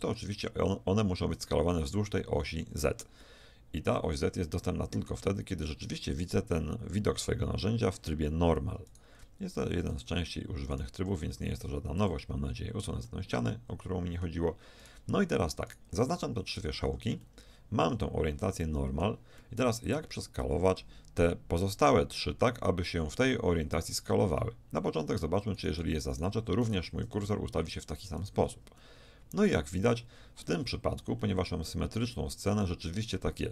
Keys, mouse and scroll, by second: 3.3-5.1 middle drag, 8.9 right click, 9.9-10.9 middle drag, 10.9-12.5 right drag, 11.5 x, 14.8 middle click, 15.7 right click, 16.6-19.0 middle drag, 20.7-27.0 middle drag, 27.2-29.0 middle drag, 31.7-32.9 middle drag.